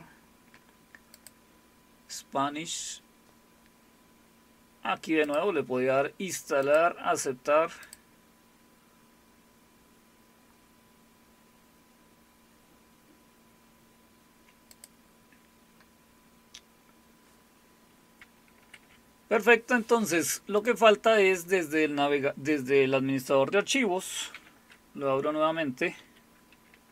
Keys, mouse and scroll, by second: 1.1 click, 5.2 click, 6.6 click, 7.8 click, 14.7 click, 18.6 super+q, 20.6 click, 24.3 alt+super+r, 26.0 Escape.